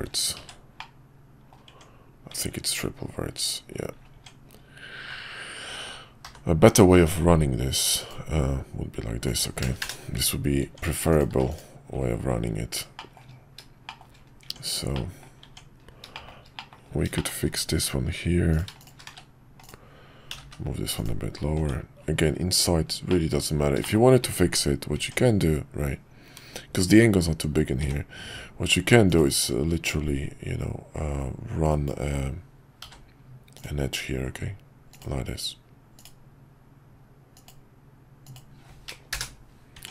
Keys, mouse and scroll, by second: 0.4 1, 0.8 middle click, 1.7 Tab, 2.3 Tab, 6.2 k, 10.6 Tab, 11.1 click, 11.3 x, 13.0 shift+middle click, 13.1 shift+scroll down 1, 13.9 shift+middle click, 14.0 shift+scroll down 1, 14.4 Tab, 14.9 middle click, 16.1 shift+middle click, 16.5 middle click, 17.1 shift+middle click, 18.8 shift+click, 19.1 1, 19.6 click, 20.3 g, 21.6 Tab, 23.1 middle click, 23.8 middle click, 25.0 Tab, 27.8 k, 39.7 Tab.